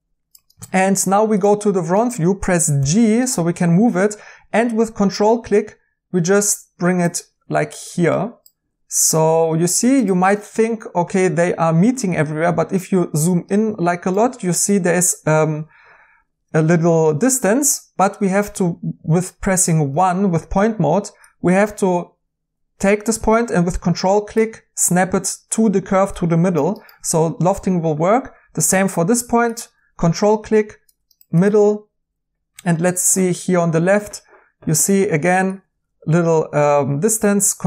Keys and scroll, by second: 2.7 g, 19.9 1.